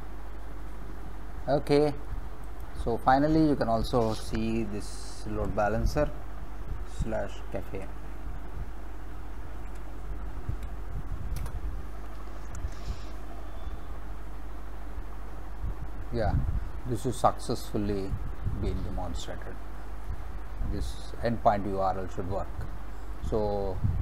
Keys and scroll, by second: 5.4 ctrl+v, 7.0 /, 7.8 c, 9.4-10.6 typing, 11.4 Return.